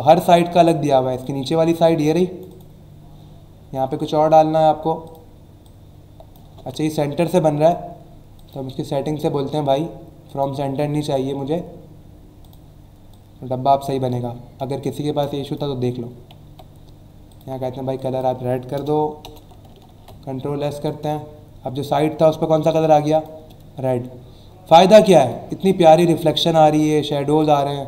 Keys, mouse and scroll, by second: 1.1 click, 2.0 click, 3.8 alt+scroll down 1, 5.0 click, 5.6 click, 6.5 ctrl+z, 8.4 click, 10.2 click, 12.4 click, 13.1 click, 14.6 space, 16.4 v, 17.3 click, 17.9 click, 19.2 alt+BackSpace, 19.8 ctrl+s, 20.7 click, 22.3 alt+scroll up 1, 22.8 space, 22.8 click, 23.3 space, 24.0 alt+scroll down 1, 24.4 alt+scroll up 1, 24.9 space, 25.0 click, 25.4 space, 26.8 space, 27.1 click, 27.3 space, 27.5 click, 27.7 space.